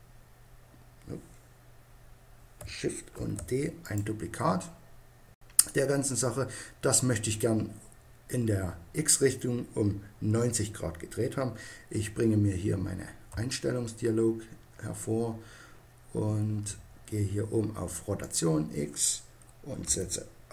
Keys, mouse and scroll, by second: 3.2 shift+d, 4.0-5.7 drag, 13.3 n, 16.4-19.8 middle drag, 19.8 click.